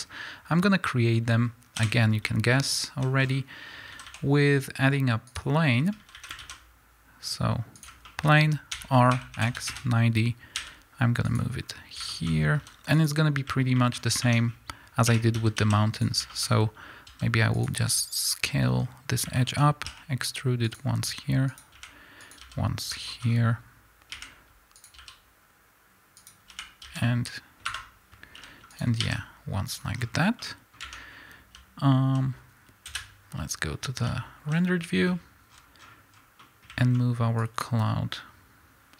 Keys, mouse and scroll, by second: 0.0-1.7 scroll down 2, 1.7 KP_1, 3.0 z, 3.2-3.9 scroll down 2, 3.9 a, 5.2 click, 5.7 scroll down 1, 6.0 a, 7.8 shift+a, 8.1-11.6 middle drag, 8.2-8.8 scroll up 2, 8.8 r, 9.8 KP_Enter, 10.6 g, 11.6 scroll up 1, 12.1 middle drag, 12.3 scroll up 2, 12.6 s, 13.4 click, 13.8 middle click, 14.2 Tab, 15.1 2, 15.4 a, 16.0 click, 16.3-18.8 middle drag, 17.1 s, 18.8 scroll up 1, 19.4-20.7 middle drag, 19.9 e, 20.7 click, 21.1 s, 21.8 e, 22.5 s, 23.1-24.8 middle drag, 23.2-24.1 scroll up 1, 24.1 e, 24.8 click, 25.0 s, 26.3 click, 26.5 e, 27.7 Escape, 28.4 g, 29.0 s, 30.0 scroll down 1, 30.4-33.0 middle drag, 30.8 Tab, 32.1 z, 32.9 KP_0, 34.5 z, 37.5-38.9 drag.